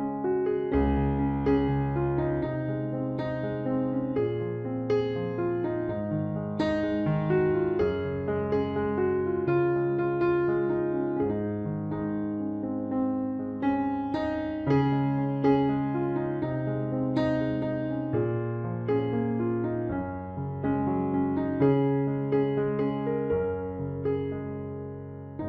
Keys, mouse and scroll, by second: 0.2 right click, 0.7-2.6 middle drag, 2.6 right click, 5.3-8.8 right drag, 9.1-11.1 right drag, 16.3 KP_7, 16.6 KP_Decimal, 16.9 KP_3, 20.4 click, 21.1 right click, 21.2-23.0 middle drag, 23.2 ctrl+r.